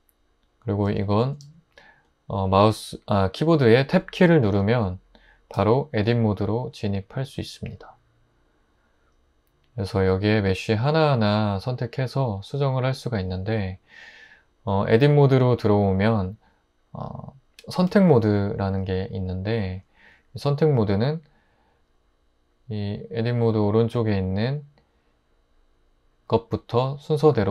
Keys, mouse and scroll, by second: 1.4 Tab, 5.5 Tab.